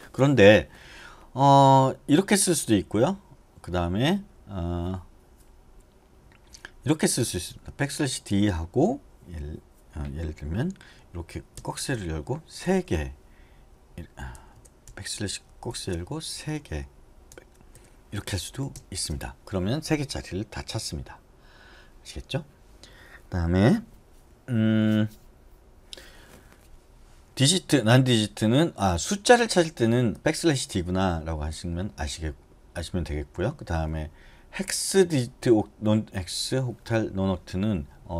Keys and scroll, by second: 7.4 BackSpace, 7.6 BackSpace, 7.9 BackSpace, 8.5 BackSpace, 11.7 {, 12.8 3, 14.6-19.4 typing.